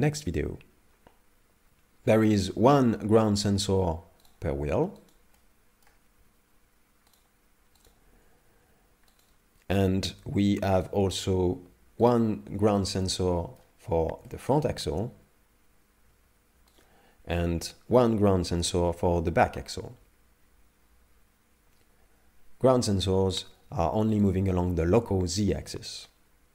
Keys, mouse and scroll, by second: 2.8 g, 4.3 right click, 5.0 right click, 5.4 middle click, 6.2 g, 7.9 right click, 8.0 g, 9.9 right click, 10.0 g, 12.2 right click, 12.8 shift+middle click, 13.1 middle click, 13.8-14.3 scroll down 2, 14.3 shift+middle click, 15.1 g, 17.5 right click, 18.7 g, 26.0 middle click.